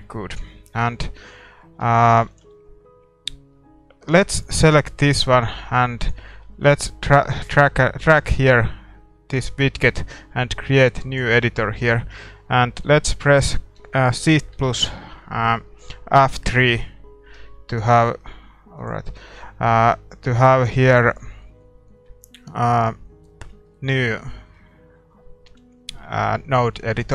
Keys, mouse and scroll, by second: 4.1 ctrl+s, 4.1-6.0 right drag, 4.5-10.9 middle drag, 5.5-27.1 drag.